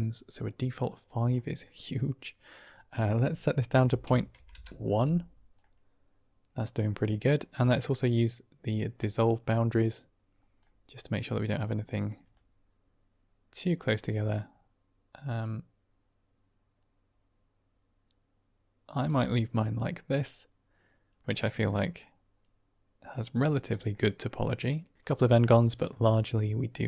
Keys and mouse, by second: 1.2 middle click, 2.5-5.1 drag, 5.5-6.8 middle drag, 8.9 click, 10.7-11.1 middle drag, 12.3-18.9 shift+drag, 19.3-21.1 middle drag, 21.6 middle drag, 23.8-24.9 middle drag, 25.8 middle drag, 26.7-26.8 middle drag.